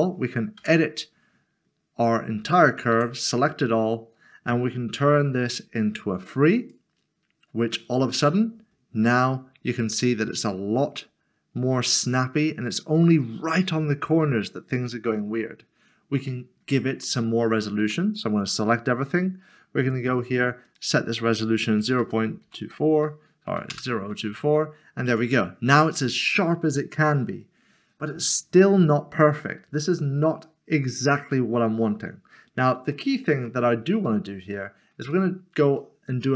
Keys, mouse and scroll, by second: 0.6 Tab, 2.9 typing, 5.1 typing, 8.2 Tab, 16.6 Tab, 19.8 typing, 21.5-22.6 typing, 23.7 Return, 25.0 Tab, 32.9 middle click, 34.5 middle click.